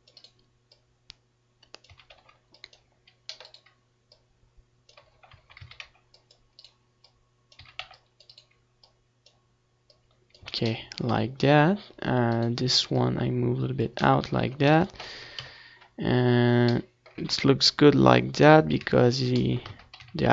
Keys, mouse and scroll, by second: 0.4 a, 0.5 c, 2.7 z, 2.8-4.2 middle drag, 4.2-5.9 right drag, 4.8 click, 5.5 middle click, 5.9 Tab, 6.1 ctrl+s, 6.8 KP_7, 8.4 ctrl+s, 9.8 z, 10.5 Tab, 10.7 z, 12.6 Tab, 12.8 ctrl+s, 13.5 KP_1, 13.9 z, 15.1 Tab, 17.0 KP_7, 17.4 Tab, 18.5 ctrl+2, 19.0 ctrl+s, 19.2 z, 19.7 Tab.